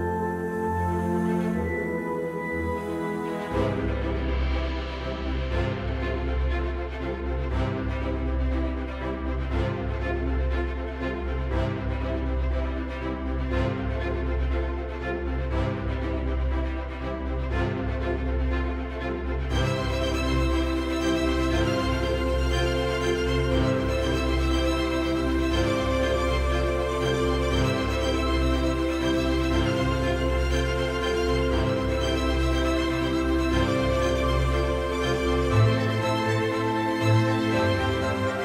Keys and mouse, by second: 0.5 s, 2.1 click, 2.5 g, 2.8 z, 4.6 click, 5.3 s, 6.7 click, 8.9-10.2 middle drag, 11.2 s, 22.2 s, 22.2 y, 24.3 right click, 25.5-26.1 middle drag, 27.3 x, 31.7 click, 33.1 KP_1, 34.9 s, 35.9 click, 38.3-38.4 middle drag.